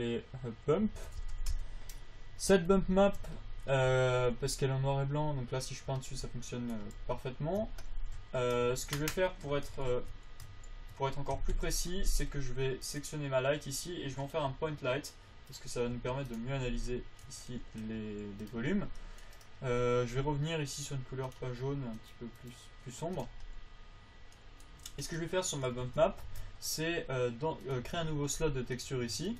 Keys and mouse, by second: 3.1 Tab, 4.5 f, 7.5 ctrl+a, 8.5 z, 9.0 z, 9.9 z, 10.8 ctrl+z, 11.7 KP_7, 11.9 KP_5, 16.3 g, 18.4 g, 26.3 ctrl+Tab, 26.6 ctrl+Tab.